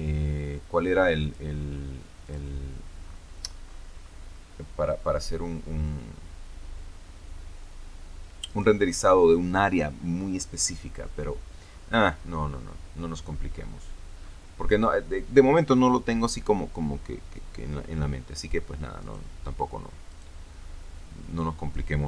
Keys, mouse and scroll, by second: 1.1 click, 2.2 click, 2.9-3.6 scroll down 2, 3.6-4.1 scroll up 2, 11.6-13.3 scroll down 6, 13.4-14.0 scroll up 2, 14.1-14.8 scroll up 4, 18.9 right click, 20.0 right click, 20.8 scroll down 2.